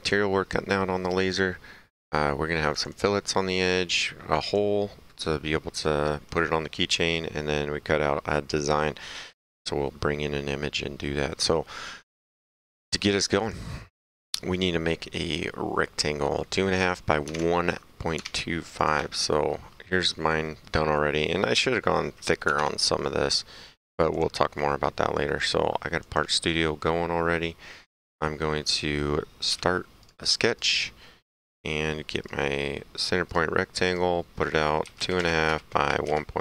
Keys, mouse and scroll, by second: 2.8 click, 4.0 click, 13.4 click, 17.4 alt+Tab, 18.3 Tab, 18.8 click, 20.3 middle click, 20.7 right click, 22.6 alt+Tab, 24.2 alt+click, 26.1 click, 27.8 middle click, 28.1 right click, 29.6 s, 30.1 click, 32.3 click, 33.3 click, 34.9-36.4 typing, 35.5 KP_Enter.